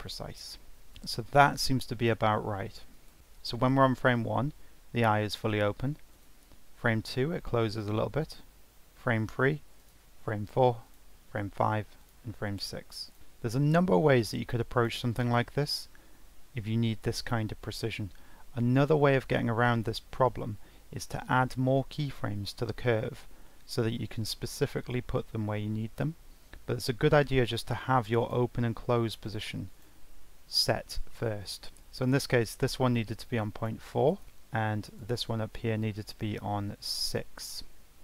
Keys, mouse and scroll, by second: 3.2-4.2 drag, 6.1-13.3 drag, 28.2-31.7 drag.